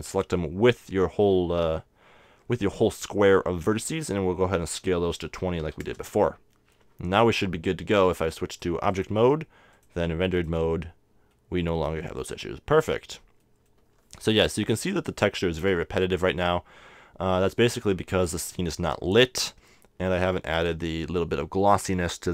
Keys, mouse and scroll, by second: 4.9 s, 8.2-11.4 drag, 12.3-14.2 middle drag, 14.3-15.4 middle drag, 14.5 KP_0.